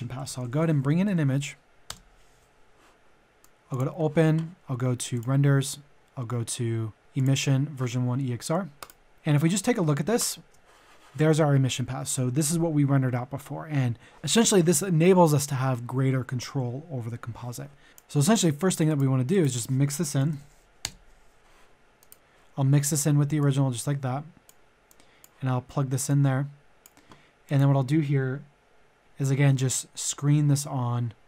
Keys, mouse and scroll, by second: 0.0 click, 0.2 typing, 1.0 Down, 1.9 Return, 3.8 click, 9.1 middle click, 10.1 ctrl+shift+click, 20.0-20.8 typing, 21.9-27.2 drag.